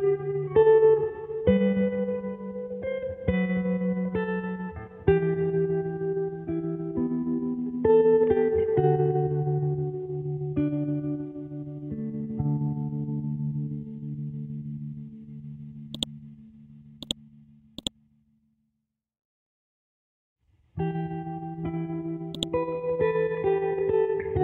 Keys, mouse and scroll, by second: 0.0-10.7 typing, 12.4-13.2 typing, 13.9 scroll down 1, 14.9-16.0 scroll up 1, 16.0 click, 18.2-19.2 scroll down 1, 19.5-21.6 scroll up 1, 22.4 click.